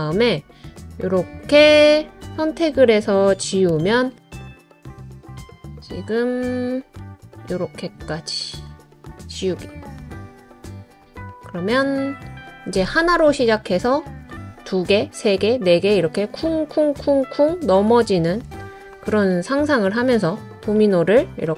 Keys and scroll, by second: 3.5 BackSpace, 5.1 BackSpace, 9.8 BackSpace.